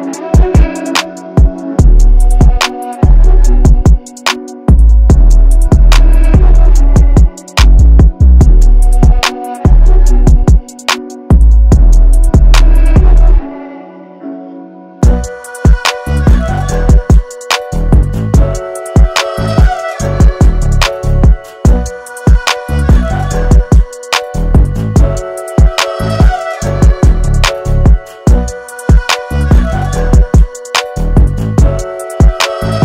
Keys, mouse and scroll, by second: 8.9 click, 10.4 0, 11.2 click, 11.7 0, 12.7 click, 13.2 0, 14.8 Return, 16.1 click, 22.1 click, 27.5 click.